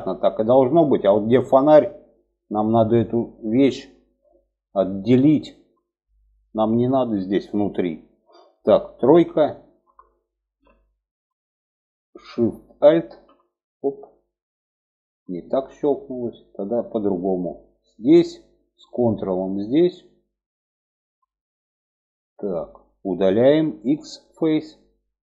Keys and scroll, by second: 8.4 3, 22.9 x.